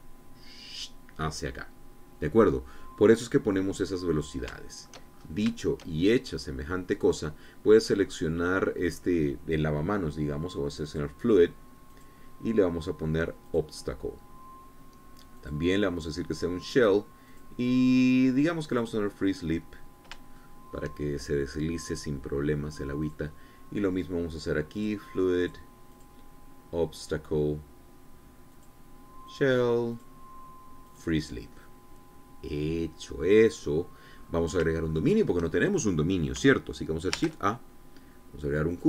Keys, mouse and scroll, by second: 4.5-4.9 scroll down 2, 5.1 shift+click, 6.6 shift+click, 7.6 click, 8.4-9.9 drag, 11.4 click, 12.5 click, 14.0 click, 15.9 click, 16.9 click, 17.9 click, 19.3 click, 20.3-20.7 scroll down 2, 20.9 shift+click, 23.6 click, 25.3 click, 26.0 click, 26.5 click, 27.5 click, 29.1 click, 29.9 click, 30.5 click, 31.5 click, 34.0-34.6 scroll down 1, 34.7-35.1 scroll up 1, 35.5 shift+click, 37.7 shift+a.